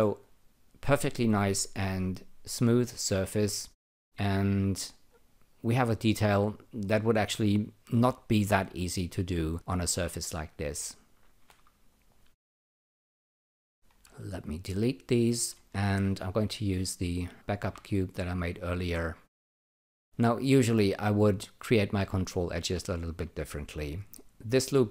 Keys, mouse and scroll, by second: 0.2-3.9 alt+drag, 4.0 alt+click, 5.0 alt+right click, 7.4 alt+click, 13.0 click, 14.0 Delete, 15.3 click, 15.5 Delete, 17.2 alt+shift+click, 17.4 alt+shift+click, 18.2 click, 18.7 alt+click, 19.6 alt+middle click, 20.1 alt+click, 20.8 alt+right click, 22.2 alt+click.